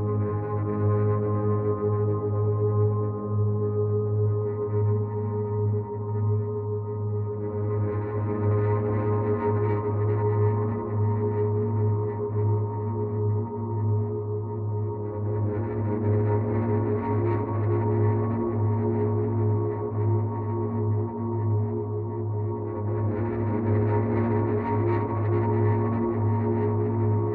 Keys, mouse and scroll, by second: 1.6 click, 6.0 alt+click, 11.7 ctrl+d, 13.6 click, 17.9 click, 20.0 right click, 22.6 click.